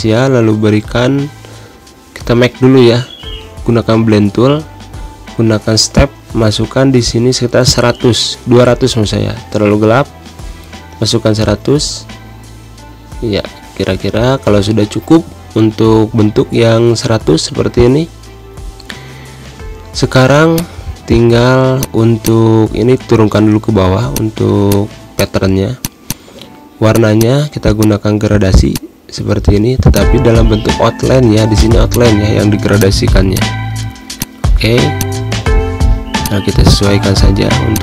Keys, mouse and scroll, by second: 7.8-8.2 typing, 8.8 click, 11.1-11.6 typing, 12.1 click, 13.7 z, 13.9 click, 15.1 z, 15.5-17.5 drag, 17.5 space, 17.6 click, 17.8 space, 18.8 click, 19.5 ctrl+End, 20.0 z, 20.2 click, 20.6 space, 20.8 click, 21.0 space, 21.5 click, 22.5 ctrl+shift+[, 23.8 click, 24.6 space, 24.8 click, 24.9 space, 28.1 z, 28.4 click, 29.4 space, 29.6 click, 29.7 space, 30.1 g, 31.6 click, 32.9 space, 33.0 click, 33.2 space, 33.8-37.8 drag.